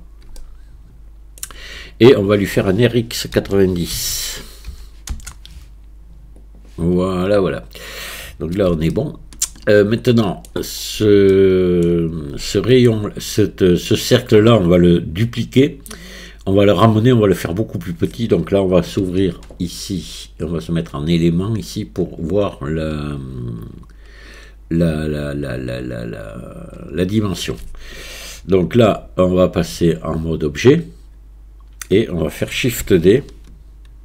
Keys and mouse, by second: 0.4-1.4 shift+drag, 3.5 r, 9.0-10.5 shift+drag, 11.3 shift+click, 12.5 shift+click, 19.0 n, 20.5 click, 29.6 Tab.